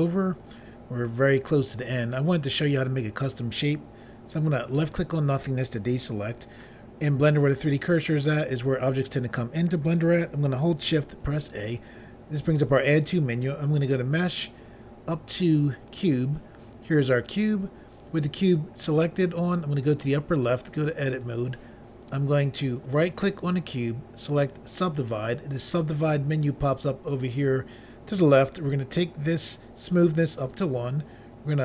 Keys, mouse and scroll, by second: 4.7 click, 4.9 click, 11.2 a, 15.9 click, 16.0 click, 20.2 click, 20.3 click, 21.1 click, 21.2 click, 23.0 right click, 24.7 click, 24.8 click, 28.5 click.